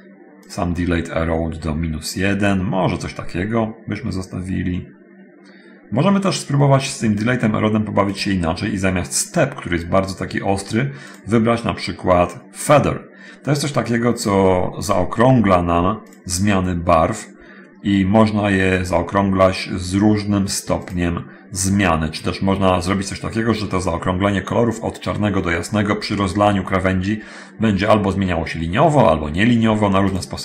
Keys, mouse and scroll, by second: 0.7 click, 6.9 scroll up 1, 8.3 click, 11.3 click, 15.9 click, 21.0 click, 30.3 click.